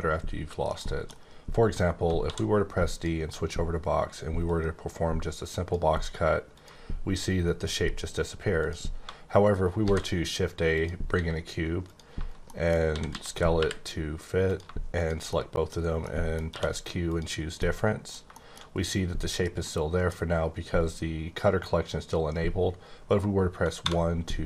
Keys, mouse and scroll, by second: 0.4 shift+middle click, 1.5 scroll up 2, 2.2 d, 2.9 click, 4.4 click, 6.5 click, 8.5 click, 8.6 click, 9.5 right click, 9.8 shift+a, 10.7 click, 11.1 s, 11.8 click, 12.4 middle click, 13.1-13.5 typing, 14.6 shift+click, 15.3 middle click, 16.0 middle click, 16.5 q, 17.0 click, 17.5 middle click, 18.7-19.6 scroll up 1, 19.6 middle click, 23.8 1.